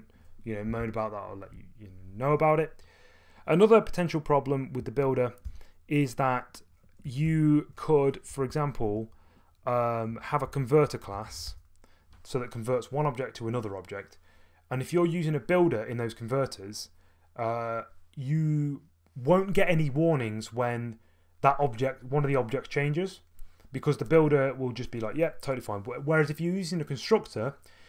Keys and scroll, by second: 5.4 k, 6.8-9.0 typing, 10.1-11.8 typing.